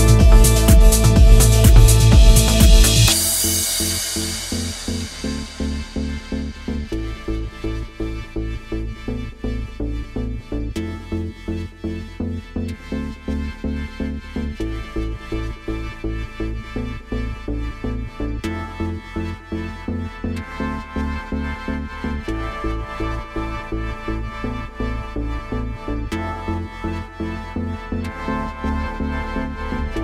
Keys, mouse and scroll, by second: 0.4-1.4 scroll down 1, 1.8 middle click, 3.3 scroll down 1, 5.0 click, 12.7 middle click, 13.3-14.0 scroll up 2, 14.0 middle click, 14.6-15.6 scroll up 2, 15.7 click, 19.0 click, 23.2 click, 25.1 click, 26.3 click, 27.0 click, 27.6 click, 28.0 scroll down 2, 28.4 middle click, 29.7 click.